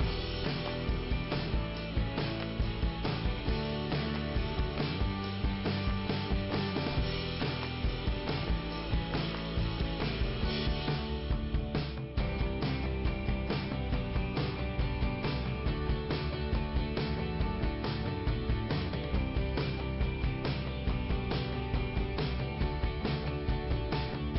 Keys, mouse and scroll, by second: 0.6 click, 1.5 i, 3.7 click, 6.7 click, 6.9 click, 9.3 click, 11.3 click, 15.6 click, 18.5 click, 19.6 click, 20.3 i, 21.3 click.